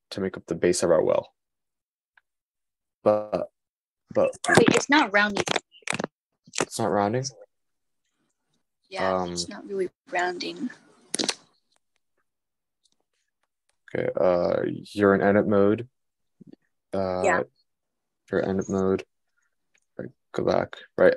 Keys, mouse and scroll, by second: 8.3 Tab, 8.3-9.6 middle drag, 8.6 Tab, 19.4 super+z, 20.2 super+z.